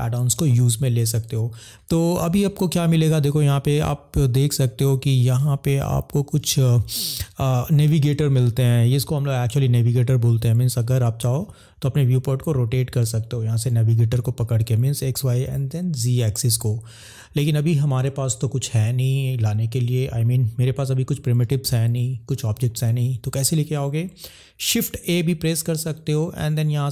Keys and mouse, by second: 10.8 click, 24.9 shift+a.